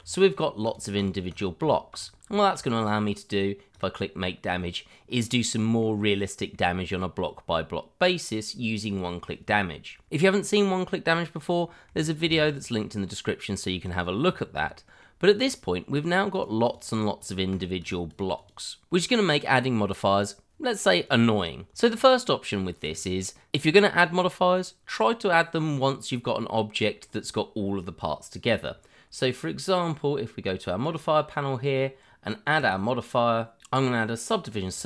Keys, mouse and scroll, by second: 0.3 click, 0.7 double click, 1.6 shift+middle click, 1.7 middle click, 1.8 shift+middle click, 1.9-2.3 shift+scroll up 1, 2.3 shift+middle click, 2.7 click, 4.4-4.9 scroll up 1, 5.0 scroll down 1, 5.8 middle click, 12.2 ctrl+z, 12.7-13.4 scroll down 1, 13.7-14.3 scroll down 1, 14.3 shift+middle click, 14.4 middle click, 15.4 click, 16.4 double click, 21.0 click, 21.7 shift+middle click, 23.5 click, 24.6 middle click, 30.8 click, 34.7 click.